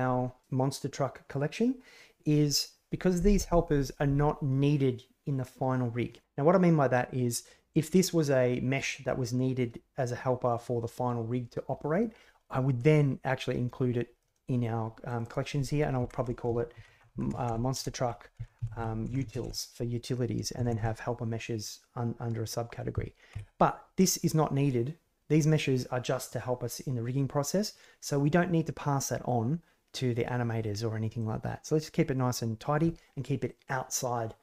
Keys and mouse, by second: 12.9-14.1 drag, 15.0 click, 15.2-23.8 drag, 17.7 BackSpace, 19.1 BackSpace, 24.1 click, 31.1-32.1 drag.